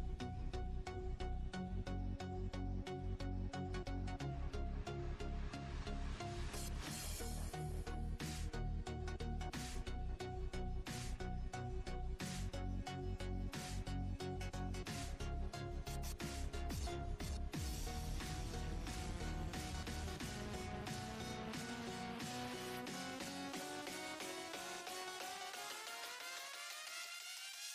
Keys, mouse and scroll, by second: 1.8 click, 3.6 click, 4.1-4.5 scroll down 7, 7.9 click, 8.3 click, 9.1 r, 14.6-14.9 scroll up 7, 16.1-18.0 drag, 20.5 s, 21.7 click, 22.0 Tab, 23.3 click, 23.9 click, 24.7 Tab, 25.5 click, 25.8 Tab, 27.1 click.